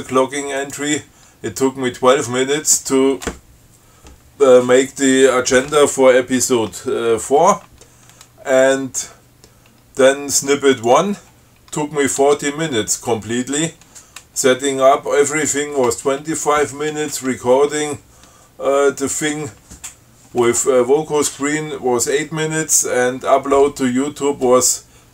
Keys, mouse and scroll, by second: 0.9 click, 11.0 click, 12.5 Tab.